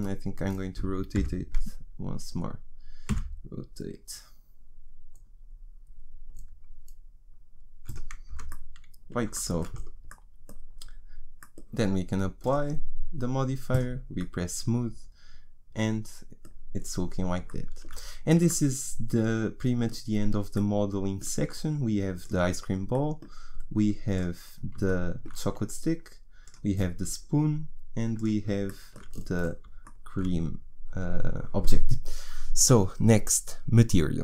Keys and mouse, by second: 1.1 o, 3.1 r, 8.3 Tab, 12.4-15.5 drag, 15.5 middle click, 16.2-19.6 middle drag, 22.3-29.2 middle drag, 29.2 click.